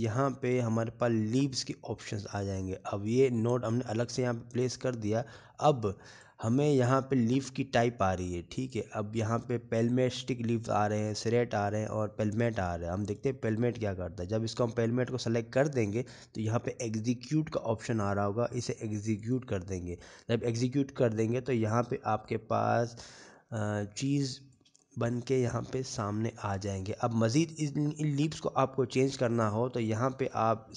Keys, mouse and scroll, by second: 5.7-6.1 scroll down 7, 6.3 middle click, 6.8-7.2 scroll up 5, 7.6 middle click, 8.5-9.0 scroll up 2, 9.0 middle click, 10.6 click, 17.2 middle click, 21.2 click, 23.8 middle click, 24.5-26.1 scroll up 9, 24.9 shift+middle click, 26.2 shift+middle click, 26.6 shift+scroll up 1, 26.8 middle click, 27.9 scroll up 2, 28.4 shift+middle click.